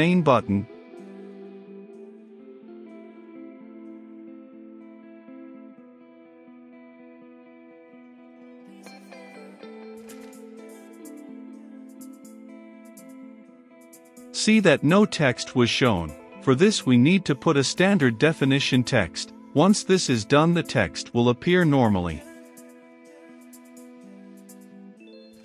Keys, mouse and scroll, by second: 0.9 click, 1.4 right click, 1.8 click, 2.1 middle click, 2.6 click, 2.7 right click, 3.1 click, 3.5 >, 3.6 t, 3.7 e, 3.8 x, 3.9 Return, 4.4-7.0 drag, 7.0 Return, 7.5 a, 7.6 n, 7.6 c, 7.8 j, 8.0 Return, 8.2 ctrl+space, 9.0 Return, 9.9 v, 10.0 e, 11.0 Return, 11.3-12.8 typing, 12.2 Return, 13.0 Return, 14.2-16.9 drag, 16.9-19.2 middle drag, 19.2-21.2 drag, 21.2 Return, 21.8 Up, 22.4-25.4 typing, 23.0 Return, 23.8 ctrl+space, 25.2 Return.